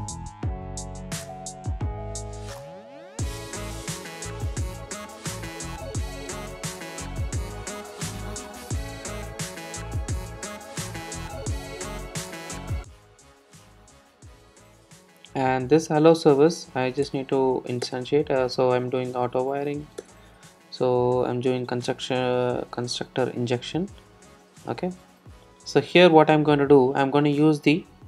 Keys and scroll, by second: 1.5 alt+Return, 10.6 Return, 21.1 super+z, 24.4 super+c.